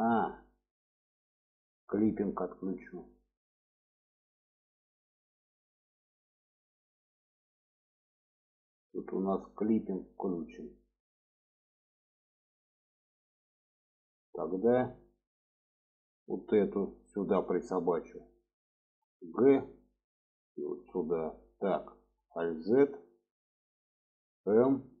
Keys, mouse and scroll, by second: 0.4 click, 2.2 click, 3.2 click, 5.1 middle click, 8.5-11.6 middle drag, 12.3 middle click, 13.1 shift+middle click, 14.0 middle click, 15.1 middle click, 16.3 click, 16.5 middle click, 19.2 g, 21.4 middle click, 22.3 alt+z, 22.9 click, 24.6 m.